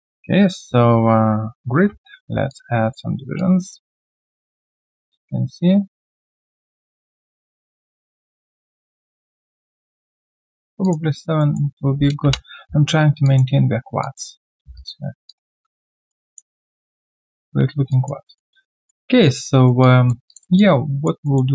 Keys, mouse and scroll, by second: 1.7 ctrl+alt+q, 2.5 alt+click, 4.1 alt+right click, 4.5 alt+middle click, 10.7 middle click, 10.8 alt+click, 11.1 alt+right click, 11.4 alt+middle click, 12.2 Return, 13.2 alt+click, 14.0 alt+click, 14.3 alt+right click, 14.8 right click, 14.8 q, 15.3 alt+click, 15.6 alt+middle click, 15.7 alt+scroll down 1, 16.0 alt+click, 17.0 alt+middle click, 17.4 alt+click, 18.2 alt+middle click, 18.4 alt+scroll down 1, 18.7 alt+click, 19.5 alt+right click, 19.8 alt+click, 20.5 alt+click, 21.2 alt+middle click.